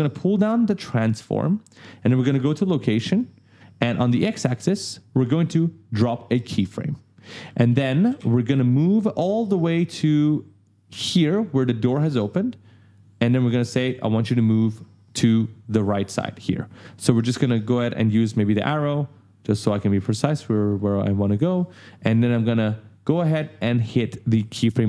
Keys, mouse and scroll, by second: 0.8 click, 2.8 click, 3.3-3.6 scroll down 1, 6.2 click, 7.0-7.9 typing, 7.2 right click, 9.6 click, 18.4 click, 24.6 click.